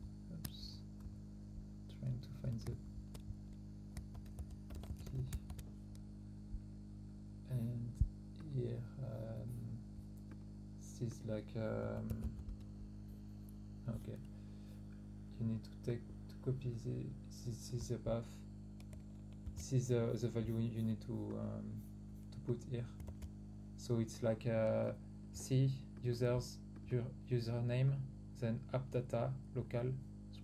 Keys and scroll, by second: 2.6 shift+?, 3.9-5.6 typing, 19.4 ctrl+c, 23.0 ctrl+v.